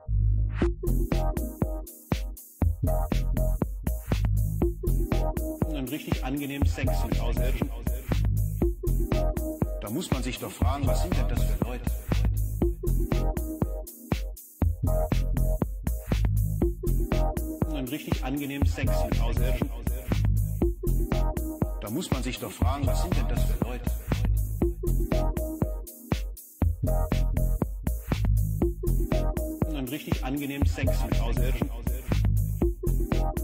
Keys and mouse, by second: 2.0 s, 3.8-4.7 drag, 8.2 click, 9.9 click, 10.7 click, 13.7-16.5 drag, 17.5 click, 19.4-21.7 drag, 27.2 click, 28.0 click, 30.5 click, 31.2 click.